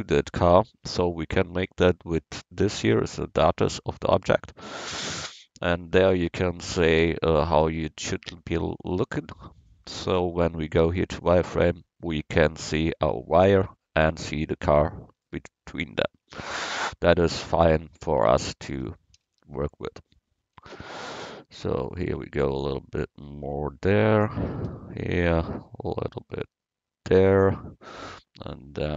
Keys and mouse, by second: 3.7-7.8 drag, 10.1-12.5 drag, 15.0 middle click, 15.9 click, 16.2 middle click, 16.9 Tab, 18.2 Tab, 18.8 a, 19.3 a, 20.6 c, 24.3 a, 24.7 c, 25.2-27.5 drag.